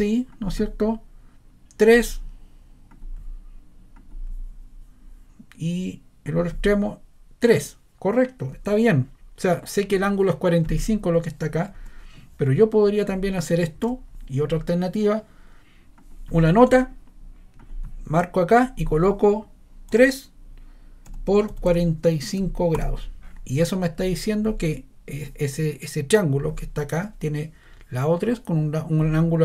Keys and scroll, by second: 11.7 ⟲, 13.7 BackSpace, 19.9 3, 21.0 typing, 22.7 Caps_Lock.